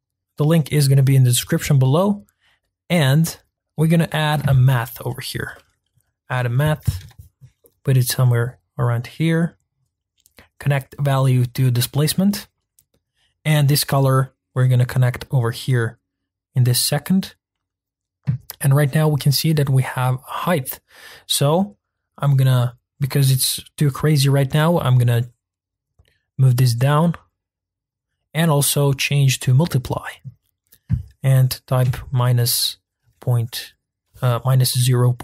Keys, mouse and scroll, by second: 0.0-1.5 drag, 9.3 click, 10.6-11.2 drag, 16.8 click, 18.4-18.9 scroll up 2, 18.9 middle click, 19.3-19.7 scroll down 2, 19.7 middle click, 20.1-20.9 scroll up 2, 23.2-23.7 scroll down 1, 23.7-24.5 scroll up 1, 24.5-25.0 scroll up 1, 25.1-35.2 drag.